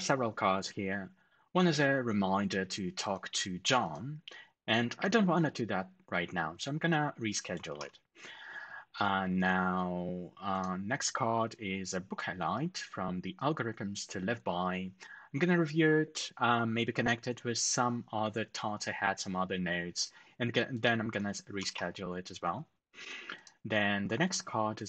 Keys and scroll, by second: 7.6 ctrl+alt+shift+super+#, 21.4 ctrl+alt+shift+super+#.